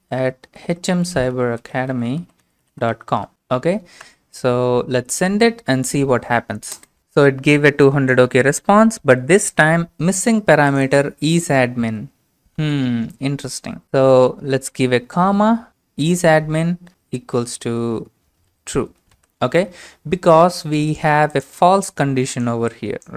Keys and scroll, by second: 0.0-4.0 typing, 5.9-7.5 typing, 12.6 ctrl+c, 16.4-16.9 typing, 18.7-21.9 typing.